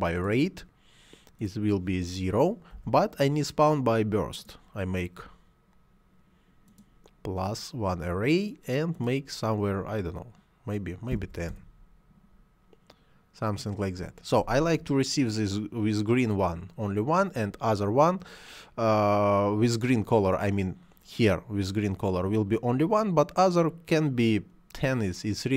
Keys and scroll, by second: 2.6 0, 11.0 1, 11.1 0, 11.4 Return.